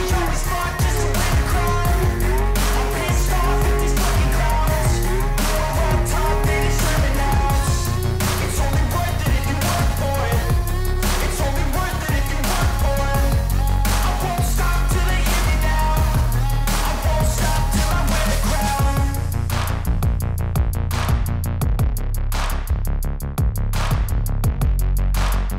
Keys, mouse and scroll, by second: 0.0 click, 1.6 click, 2.3 click, 3.3 click, 4.8 click, 6.6 click, 7.6 click, 9.3 click, 13.7 click, 17.0 click, 17.4 click, 18.9 click, 19.3 click, 19.8 click, 22.3-23.0 scroll.